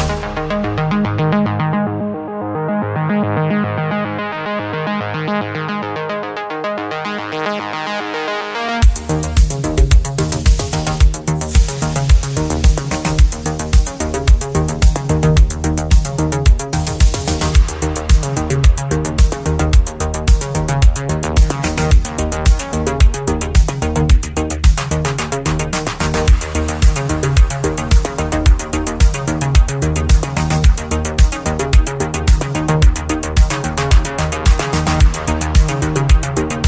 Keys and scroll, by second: 29.1 ctrl+z.